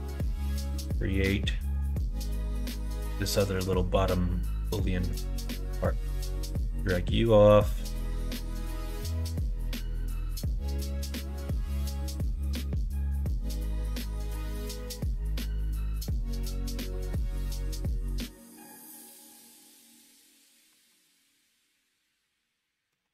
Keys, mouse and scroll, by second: 0.2 middle click, 0.7 click, 1.1 middle click, 1.8 shift+click, 2.2 middle click, 2.6 middle click, 3.5 middle click, 5.4 shift+d, 8.1 s, 10.8 g, 12.7 g, 14.3 g, 17.6-18.6 middle drag, 19.0 e, 20.7 alt+z, 21.1-23.0 middle drag.